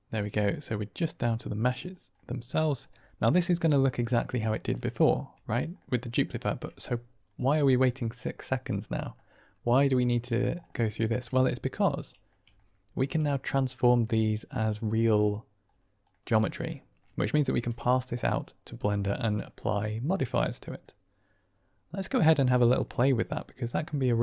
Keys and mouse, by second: 0.6-1.6 middle drag, 2.1-2.5 middle drag, 3.1 shift+middle click, 3.9-4.5 drag, 5.7-6.2 drag, 8.4 drag, 8.4-9.1 middle drag, 9.7-10.4 middle drag, 11.0 shift+middle click, 11.3-12.2 middle drag, 12.5-12.9 ctrl+middle drag, 13.9-15.0 middle drag, 16.0-16.4 middle drag, 16.6-17.0 shift+middle drag, 20.9-24.2 middle drag.